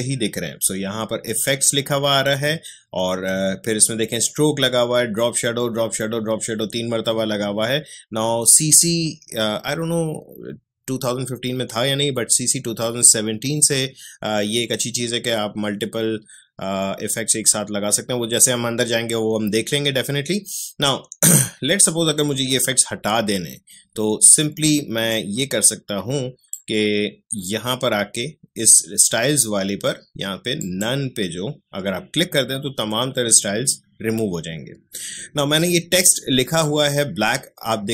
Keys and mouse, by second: 25.1-30.6 drag.